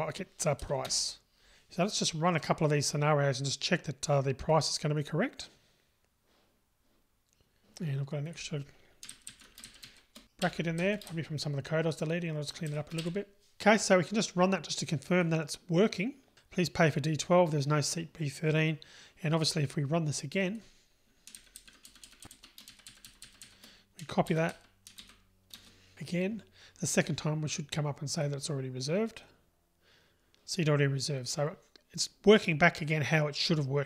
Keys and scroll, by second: 0.9 Return, 5.3 ctrl+r, 10.4 Delete, 13.4 Delete, 15.2 ctrl+r, 24.4 super+c, 25.0 super+v, 28.2 super+r.